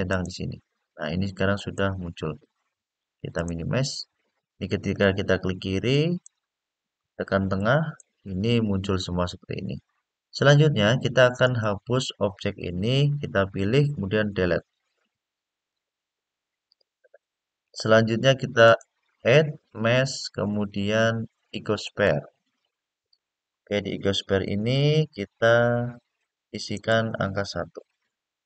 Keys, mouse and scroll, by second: 1.3 click, 3.1 click, 5.6 click, 7.3 middle click, 10.0 scroll down 2, 10.3-10.9 scroll up 3, 11.2 click, 14.2 Delete, 18.4-21.8 drag, 24.6 click, 26.5-28.4 drag.